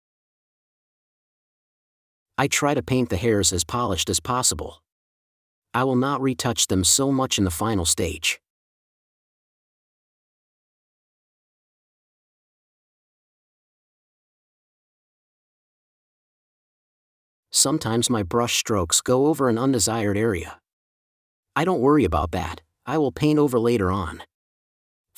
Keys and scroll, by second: 0.3 4, 6.3 space, 9.7 space, 10.3 n, 12.1 space, 15.9 space, 16.7 4, 19.5 space, 21.3 space, 24.2 super+space.